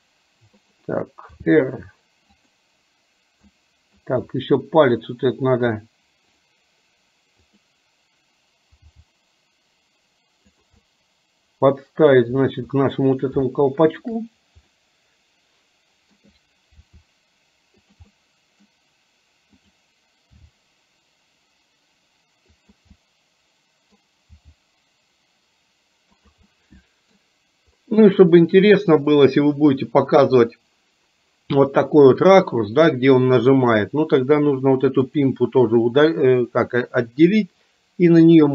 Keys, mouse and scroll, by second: 1.5 r, 3.6-4.1 middle drag, 7.6 click, 8.8 g, 11.0-12.2 middle drag, 13.0-13.5 middle drag, 13.6-14.1 shift+middle drag, 14.8-16.2 middle drag, 17.0 r, 18.2 middle click, 19.7 click, 20.5 g, 23.0-24.1 middle drag, 24.5 g, 26.6-27.2 middle drag, 35.1 click.